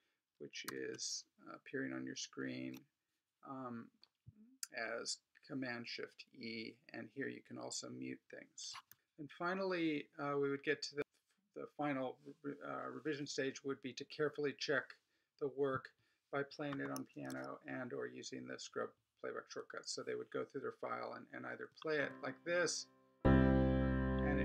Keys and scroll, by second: 0.7 shift+super+e, 17.1 Escape, 21.7 space.